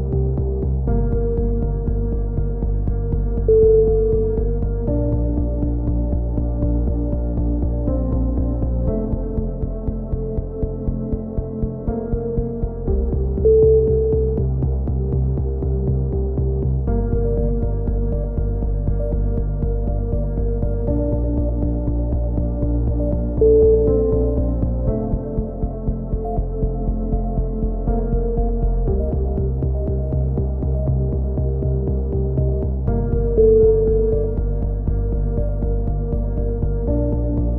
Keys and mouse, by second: 1.8-3.5 typing, 6.4 z, 6.7 a, 8.2 a, 8.9 KP_7, 12.8 z, 13.3-13.8 right drag, 13.3 KP_1, 13.5 z, 14.3-14.9 middle drag, 14.7 z, 14.9 z, 16.1 c, 17.2-18.1 right drag, 17.6-19.7 drag, 19.7 z, 20.5-21.0 drag, 23.2-23.7 drag, 24.2 KP_1, 24.4 z, 26.8 a, 27.9 right click, 28.3-29.4 drag, 32.9 a, 33.0 z, 36.4 ctrl+z, 36.6 ctrl+z.